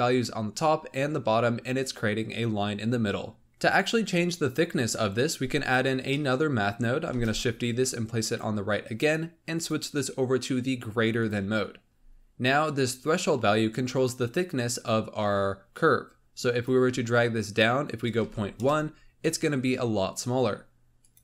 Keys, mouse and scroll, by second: 3.4-5.5 middle drag, 5.5 click, 6.0-7.0 middle drag, 7.0 shift+d, 9.5-11.8 drag, 11.8-13.8 scroll up 4, 16.4-19.5 drag, 20.9-21.2 drag.